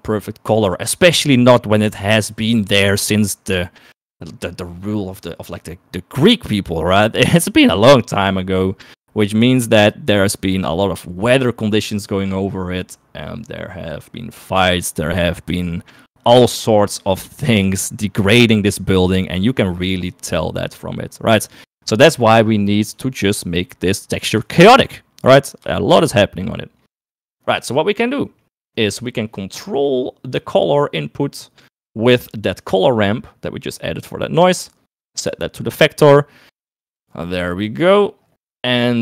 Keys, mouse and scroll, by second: 20.9 middle click, 23.5 KP_3, 24.9-26.2 shift+middle drag, 26.7 shift+middle click, 27.7 middle click, 29.1 middle click, 30.1 middle click, 31.2 middle click, 32.4 middle click, 34.9 click, 37.0 middle click, 38.7 middle click.